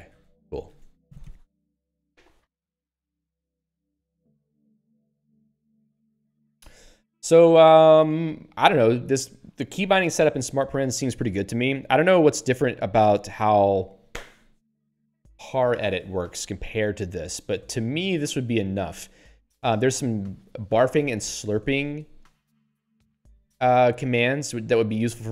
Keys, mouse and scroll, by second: 0.1 ctrl+/, 0.7 ctrl+s.